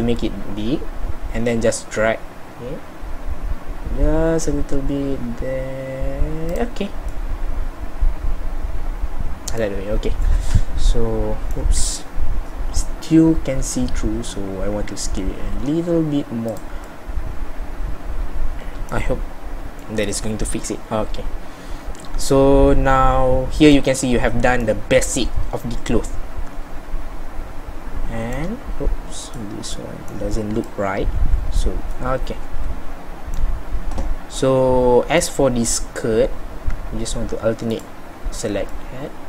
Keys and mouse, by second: 7.2-9.0 middle drag, 12.9 middle click, 13.2-16.9 middle drag, 19.2 middle click, 20.2 middle click, 21.0 middle click, 21.2 middle click, 21.8 middle click, 22.4 middle click, 32.3 middle click, 32.8-37.8 middle drag, 38.8 middle click.